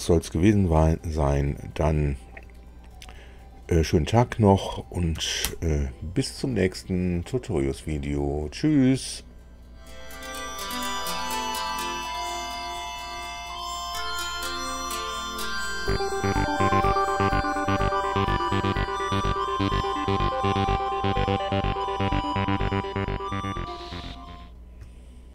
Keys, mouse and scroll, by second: 5.4 super+i.